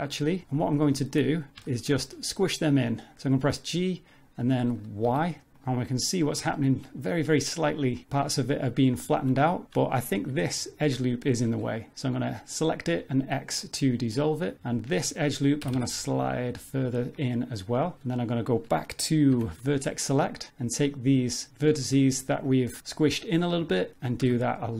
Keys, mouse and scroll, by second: 0.3 shift+middle click, 0.6 middle click, 1.3-2.4 scroll up 5, 1.6 shift+middle click, 2.6-4.4 scroll down 3, 4.4 g, 5.9-6.4 scroll down 4, 6.5 shift+middle click, 9.0 shift+middle click, 9.6-10.2 scroll up 8, 10.2 2, 10.6 alt+click, 13.0 x, 14.7 alt+click, 15.6 g, 20.0 1, 21.5 click, 22.2 shift+click, 23.4 scroll down 3, 23.7 shift+middle click, 24.2 g.